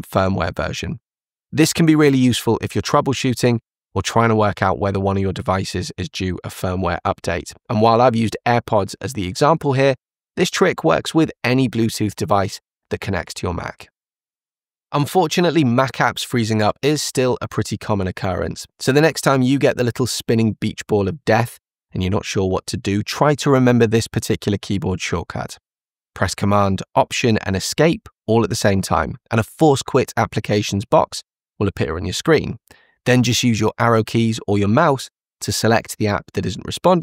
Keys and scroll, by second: 30.0 alt+super+Escape, 33.6 Down.